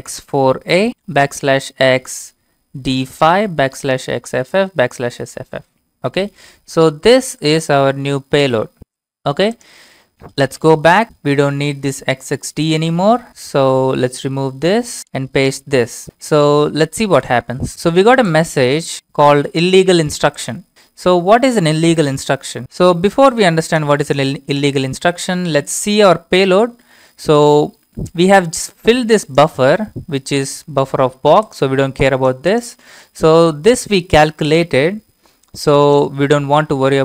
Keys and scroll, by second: 10.4 Up, 11.3 BackSpace, 12.0 BackSpace, 12.2 BackSpace, 12.4 BackSpace, 13.3 Left, 13.3 Left, 14.1 BackSpace, 14.6 BackSpace, 14.6-15.0 BackSpace, 15.7 ctrl+v, 17.2 Return.